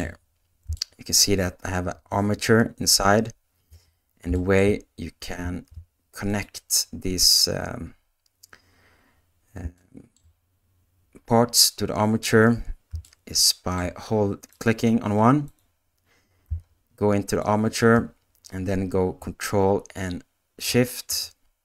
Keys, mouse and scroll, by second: 0.7 shift+middle click, 4.3 shift+middle click, 5.4 ctrl+Tab, 9.7 shift+middle click, 13.0 shift+middle click, 20.7 ctrl+Tab.